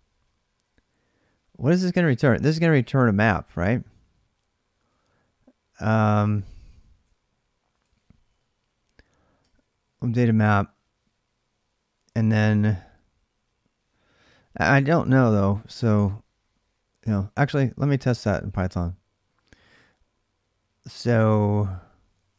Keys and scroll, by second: 3.2-9.8 typing, 11.8 typing, 17.8 ctrl+a, 18.0 c, 21.6-22.3 typing.